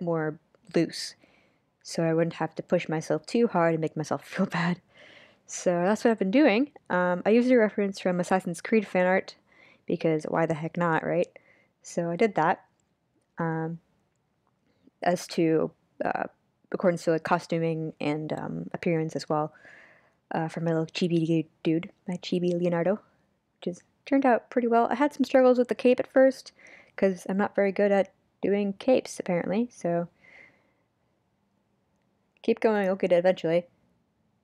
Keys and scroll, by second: 7.1 super+z, 8.0 super+z, 8.6 super+z.